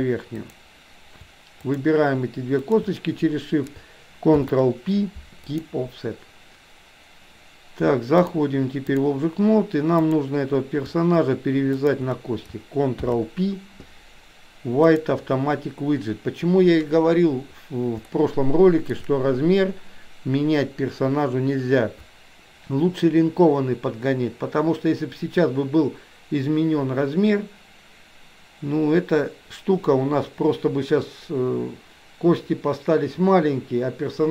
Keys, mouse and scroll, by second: 1.6 shift+click, 2.7 shift+click, 4.5 ctrl+p, 8.2 click, 10.0 click, 11.8 shift+click, 13.1 ctrl+p, 18.1-19.1 shift+middle drag.